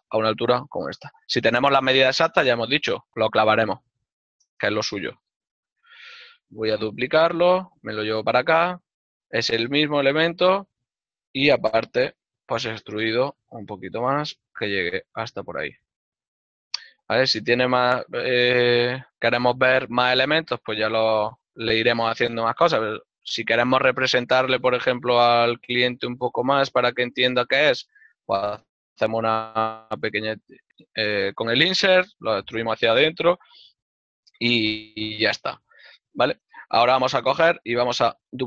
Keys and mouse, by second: 5.0 right click, 5.2 l, 7.0 x, 10.2 right click, 17.5 ctrl+middle click, 21.2 ctrl+middle click, 23.7 right click, 23.9 ctrl+middle click, 26.7 click, 33.8 ctrl+middle click, 38.0 right click.